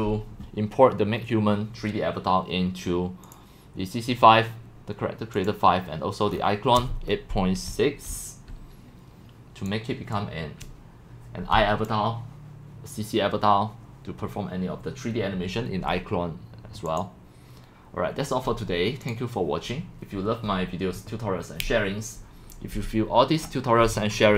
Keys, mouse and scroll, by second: 6.3-7.1 scroll down 7, 7.4-8.6 typing, 7.6 scroll down 1, 9.1-9.6 drag, 10.1-11.8 drag, 24.2 middle click, 24.3 middle click.